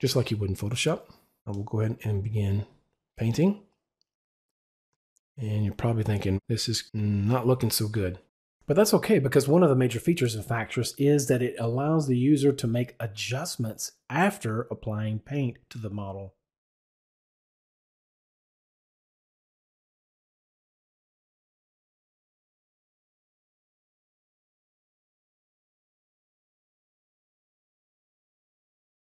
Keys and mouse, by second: 1.5 click, 7.6 double click, 9.5 click, 12.7 click, 14.0 click, 23.0 click, 23.8 click.